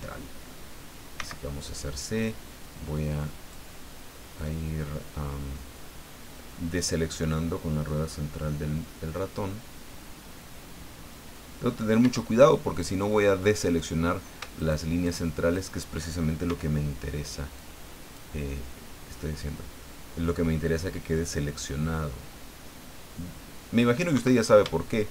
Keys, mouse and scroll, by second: 1.1 c, 1.5-2.2 scroll down 3, 2.9 click, 4.4-11.8 middle drag, 12.0 Escape, 14.5 shift+right click, 15.0 shift+right click, 15.5 shift+right click, 16.4 c, 17.6 click, 18.4-23.9 middle drag, 24.1 Escape.